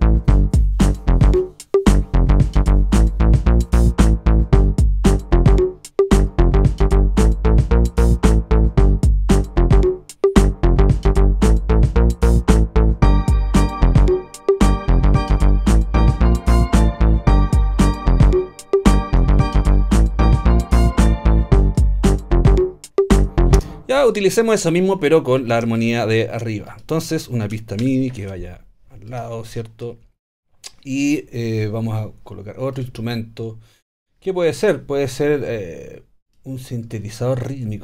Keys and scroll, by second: 23.6 alt+space, 24.4 space, 27.8 shift+super+t.